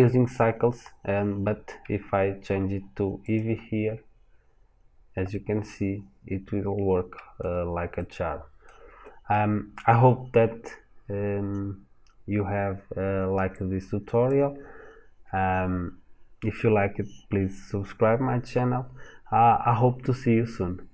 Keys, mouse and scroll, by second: 5.2 middle click, 13.4 click.